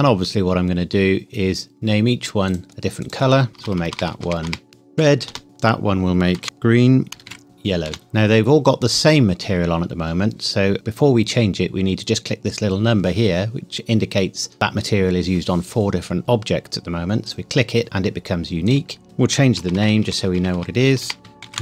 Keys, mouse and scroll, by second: 2.5 click, 3.5 BackSpace, 4.7-7.6 typing, 5.3 Return, 7.9 Return, 8.9 click, 17.3 click, 19.6 BackSpace, 21.5 typing.